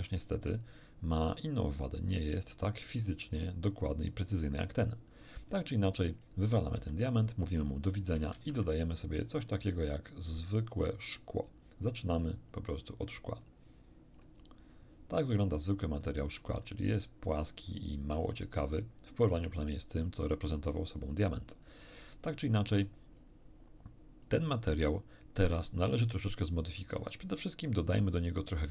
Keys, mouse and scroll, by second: 0.1-1.7 shift+middle drag, 6.1 click, 6.7 x, 8.3 shift+a, 11.3 click, 12.5 click, 13.4-14.3 drag, 15.3 scroll down 1, 16.0-21.7 shift+middle drag, 23.1-24.4 drag.